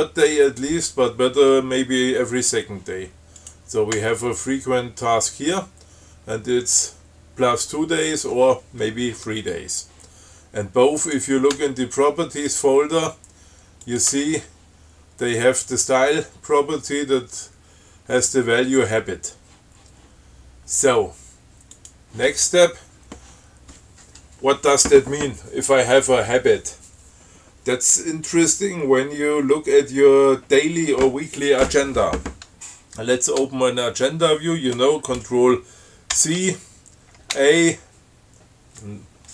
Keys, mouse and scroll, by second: 3.7 click, 4.2 Tab, 11.3 click, 11.8 Tab, 14.1 click, 14.4 Tab, 22.1 click, 36.4 ctrl+c, 37.6 a.